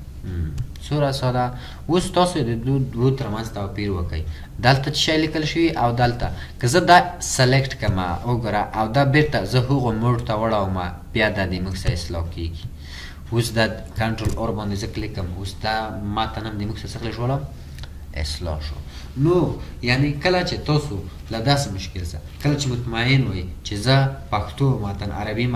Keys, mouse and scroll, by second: 4.3-4.8 ctrl+scroll up 1, 8.0 ctrl+scroll, 8.1-8.6 ctrl+scroll down 1, 14.7 ctrl+ق, 18.0-18.4 ctrl+scroll up 1.